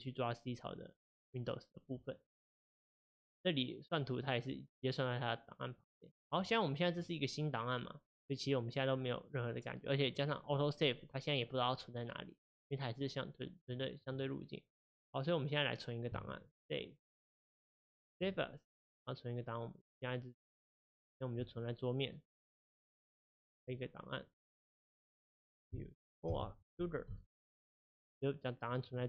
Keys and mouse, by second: 18.3-29.0 drag.